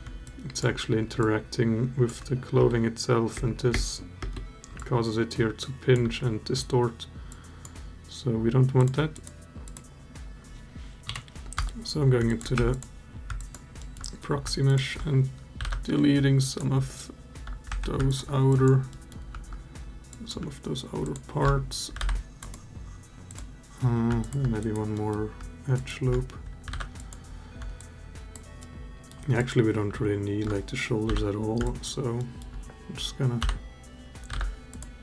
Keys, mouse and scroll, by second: 0.0-0.4 alt+drag, 1.0-1.8 alt+drag, 2.3 space, 3.1 space, 3.5 space, 3.9 space, 4.5-5.7 alt+drag, 7.1-7.4 drag, 8.9 click, 9.4 click, 10.8 KP_Divide, 11.4 Tab, 12.1 alt+click, 12.3 3, 12.5 click, 13.1 alt+click, 13.5 alt+middle click, 15.4 Delete, 17.5 1, 17.9 alt+shift+click, 18.3 alt+click, 18.7 alt+middle click, 19.9 alt+click, 20.8 alt+shift+click, 21.7 Delete, 24.0 alt+shift+click, 24.4 alt+click, 24.7 alt+middle click, 25.5 alt+shift+click, 26.5 Delete, 27.6 alt+click, 28.4 alt+middle click, 29.1 alt+click, 30.8 l, 31.5 alt+click, 32.0 alt+middle click, 33.2 l, 34.1 Delete.